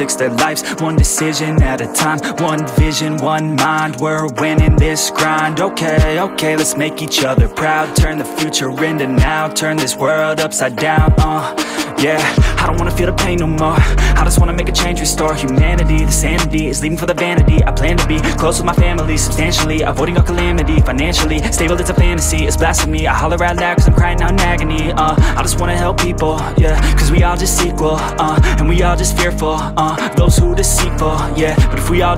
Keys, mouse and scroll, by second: 0.7 z, 4.0 scroll up 1, 6.6 click, 8.1 scroll down 8, 9.1-10.9 scroll down 1, 10.9-14.3 drag, 15.9-16.3 scroll down 10, 17.4-21.5 drag, 21.5 z, 22.2-28.0 middle drag, 28.8-29.3 middle drag, 29.3 scroll down 2, 29.6 scroll up 1, 29.6-30.5 middle drag, 30.5 g.